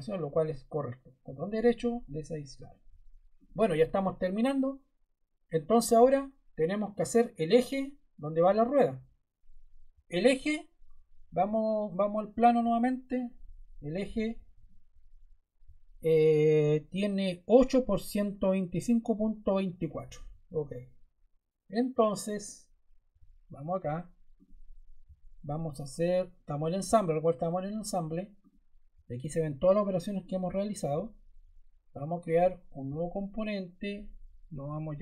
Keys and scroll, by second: 34.4-35.0 typing.